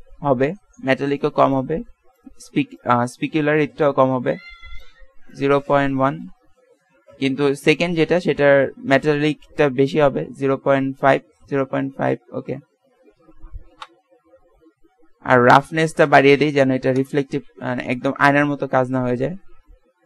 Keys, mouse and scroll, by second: 9.6 click, 15.6 click, 18.1-19.2 middle drag, 19.5 shift+z.